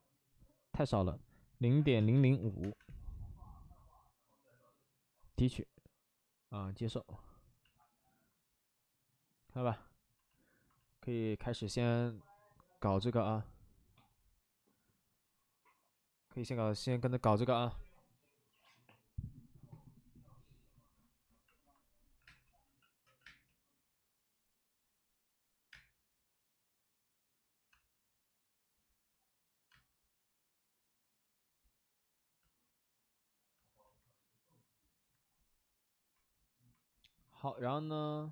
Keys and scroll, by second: 1.5-2.3 typing, 2.5 Return, 2.7 Return, 7.9 Return, 22.1-23.2 typing, 25.6 space, 27.7 space, 29.6 space, 31.5 space.